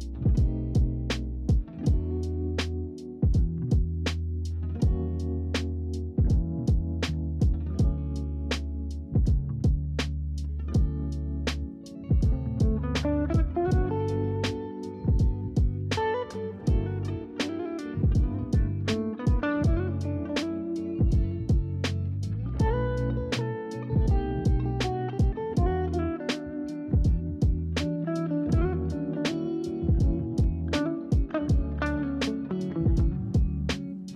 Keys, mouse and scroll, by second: 0.6-1.7 middle drag, 1.7-3.6 scroll up 1, 3.6 scroll down 1, 3.8-9.3 middle drag, 9.3 click, 10.3-13.3 middle drag, 13.3 KP_7, 14.1 scroll up 2, 15.7-17.5 g, 17.8 shift+d, 18.3-20.0 g, 20.6 click, 21.4-22.1 g, 22.5-23.4 g, 23.7 click, 24.1 g, 26.7-29.7 drag, 30.2 shift+d, 30.7-32.1 g, 32.6 shift+d, 32.9 g.